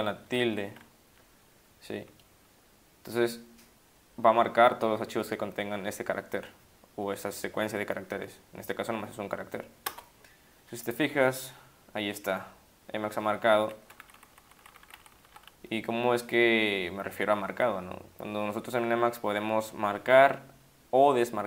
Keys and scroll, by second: 0.4 shift+`, 9.9 Return, 14.0 Down, 14.1 Down, 14.3 Down, 14.4 Down, 14.6 Down, 14.7 Up, 14.8 Up, 14.9 Down, 15.1 Down, 15.2 Down, 17.6 Up, 17.7 Up, 20.0 Up.